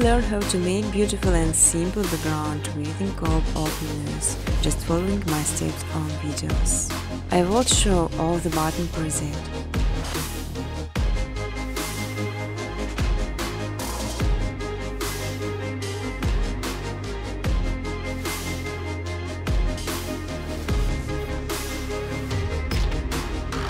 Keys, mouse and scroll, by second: 1.1 typing, 1.2 click, 2.5 click, 3.9 click, 4.8-7.8 typing, 8.7 Tab, 9.2-10.0 typing, 10.6 Tab, 12.0 typing, 14.6 Return, 16.3 click, 17.0-17.8 typing, 17.7 click, 18.9 click, 19.2 click, 20.2 click, 20.5 click, 20.9 click, 22.0 click, 22.3 click, 22.6 click, 23.1 click.